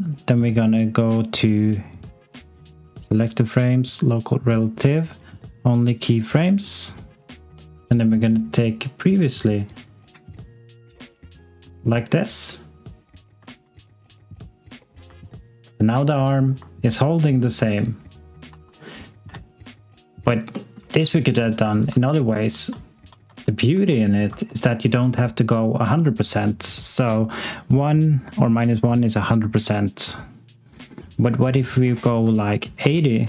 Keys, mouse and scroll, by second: 11.7 alt+click, 13.4 click, 15.2 alt+click, 17.1 click, 18.4 x, 19.5 alt+click, 20.5 alt+middle click, 21.0 alt+click, 21.6 ctrl+click, 21.8 ctrl+z, 24.4 alt+z, 24.6 alt+click, 26.9 click.